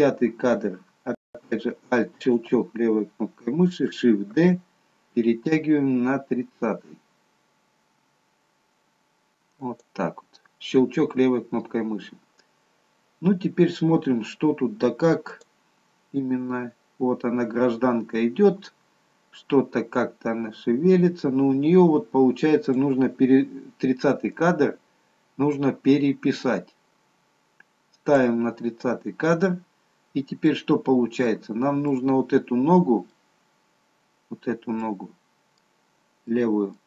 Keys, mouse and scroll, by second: 4.5 shift+d, 11.8-13.3 scroll down 1, 15.3 click, 23.0 click, 24.6 click, 29.1-30.3 scroll up 2, 30.3 scroll up 4, 30.4 middle click, 31.9 middle click, 36.2 middle click.